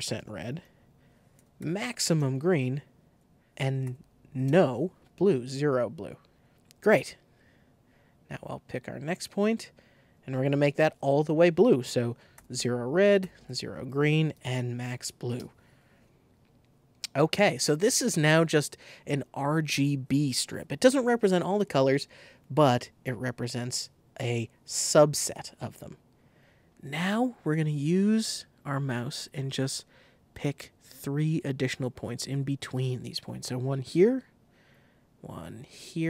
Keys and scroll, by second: 0.1 Tab, 1.0 2, 1.3 5, 2.1 Tab, 3.5 Tab, 3.8 0, 4.4 Return, 11.6 super+a, 12.3 super+0, 12.5 Tab, 13.1-14.8 typing, 13.3 Tab, 15.3 Return.